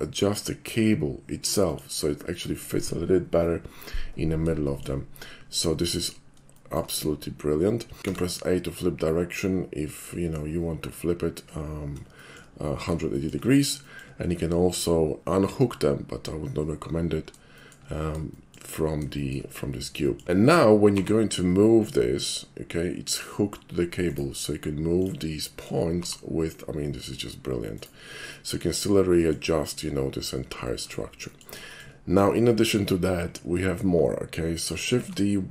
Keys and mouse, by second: 1.7 click, 2.9 middle click, 4.0 middle click, 4.7 shift+middle drag, 5.5-5.9 shift+middle drag, 6.6 shift+middle click, 7.0 shift+middle click, 8.2 a, 8.3-10.7 middle drag, 11.4-12.2 middle drag, 12.4-13.1 shift+middle drag, 13.9 shift+middle click, 14.2 shift+middle drag, 17.6 shift+middle click, 18.4 shift+middle click, 19.2 shift+middle drag, 19.6 shift+middle drag, 20.1 shift+middle click, 20.2 g, 24.1 right click, 25.0 click, 25.5 middle drag, 26.0 g, 27.8-28.3 right drag, 28.4 middle drag, 28.9-29.4 middle drag, 29.7 shift+middle click, 30.6 shift+middle drag, 31.2 shift+middle click, 31.7 shift+middle click, 32.5 shift+click.